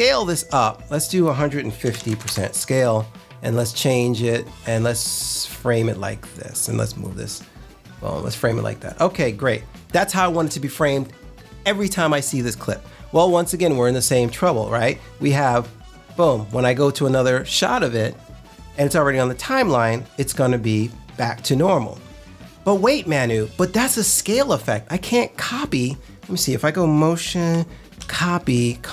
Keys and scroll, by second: 1.5-2.5 typing, 27.9 super+c.